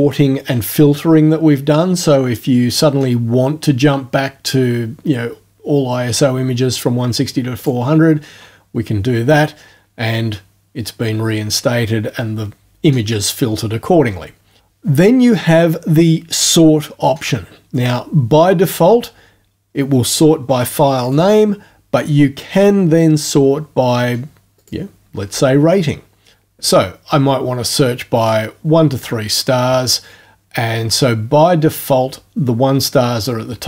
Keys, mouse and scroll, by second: 7.6 click, 21.1 click, 24.6 click, 28.3-29.2 drag.